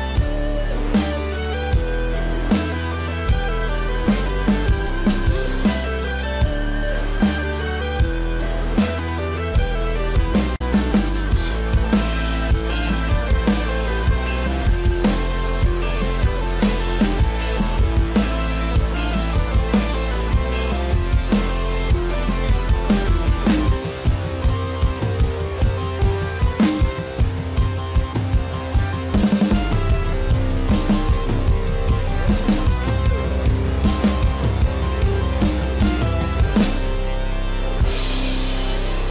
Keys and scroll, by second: 7.1 space, 14.8 ctrl+alt+z, 16.7 space, 23.2 ctrl+-, 23.4 ctrl+=, 24.1 space, 28.7 space.